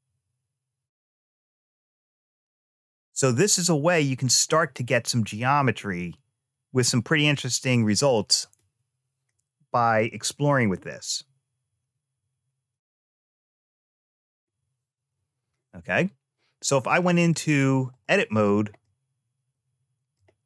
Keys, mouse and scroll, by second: 6.9 click, 7.4 click, 8.1 click, 10.6-13.4 drag, 16.9 click, 18.6-19.9 middle drag, 20.2 a.